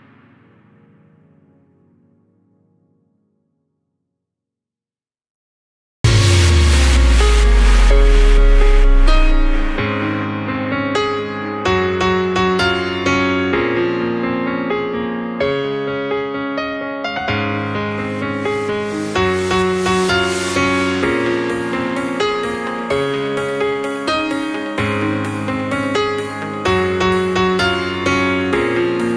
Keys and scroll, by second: 17.7 ctrl+q, 17.9 ctrl+k, 18.1 ctrl+u.